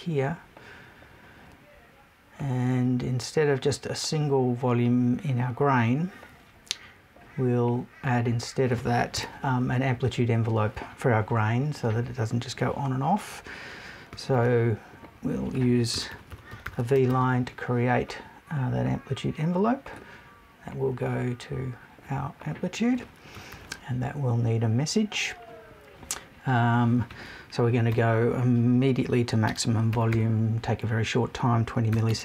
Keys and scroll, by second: 9.1 BackSpace.